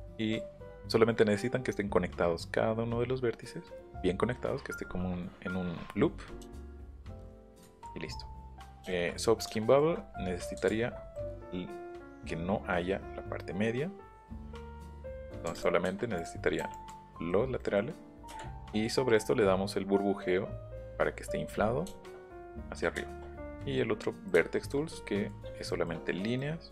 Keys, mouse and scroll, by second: 7.6 ctrl+z, 8.9 shift+middle click, 9.5 shift+middle click, 10.6 ctrl+z, 11.1 middle click, 12.0 click, 14.3 click, 14.5 click, 14.8 click, 15.1 shift+middle click, 15.5 click, 17.1 middle click, 17.6 middle click, 21.3-21.7 scroll up 2.